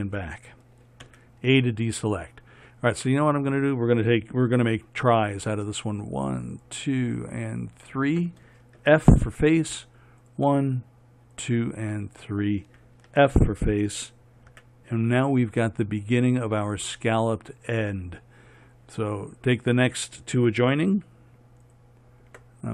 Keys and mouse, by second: 1.4 a, 6.4-9.2 right drag, 9.2 f, 10.6-14.9 right drag, 13.5 f, 14.9 a.